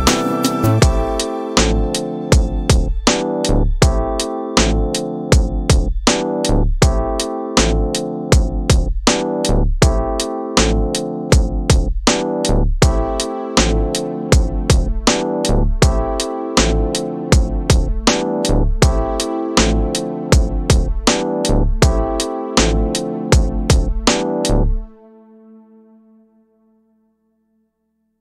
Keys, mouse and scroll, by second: 5.9 space, 6.3 middle click, 7.4 middle click, 8.3 scroll up 1, 8.4 middle click, 11.1 click, 14.5 shift+Left, 15.4 space, 17.3-17.7 scroll down 3, 18.4 scroll up 2, 20.3-20.9 scroll up 1.